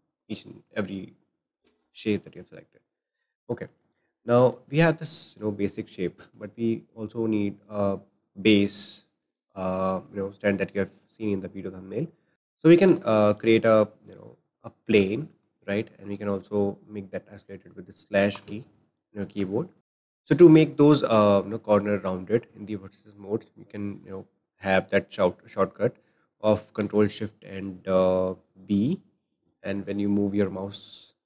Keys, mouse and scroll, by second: 2.0-2.5 shift+middle drag, 2.5-3.0 scroll down 2, 3.0-3.5 shift+middle drag, 3.5-3.8 scroll up 1, 3.8-4.6 shift+middle drag, 4.6-5.0 scroll down 4, 5.0-6.2 middle drag, 6.2 scroll down 1, 6.5-9.5 shift+middle drag, 9.5 drag, 12.3 Delete, 12.4 shift+middle click, 12.8 shift+a, 15.1-18.2 shift+middle drag, 18.3 /, 19.5 shift+middle click, 20.7-23.9 shift+middle drag, 28.7 ctrl+shift+b.